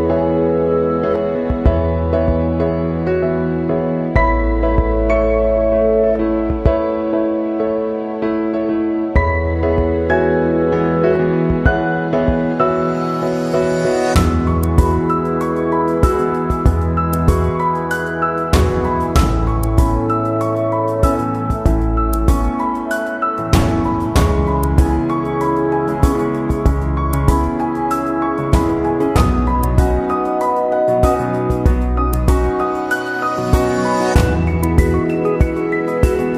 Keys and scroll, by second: 0.7 ctrl+c, 0.9 ctrl+v, 4.2 ctrl+z, 7.9 ctrl+c, 8.1 ctrl+v, 10.5 ctrl+-, 13.3 Delete, 23.3 ctrl+=, 32.9 ctrl+-, 34.0 ctrl+0.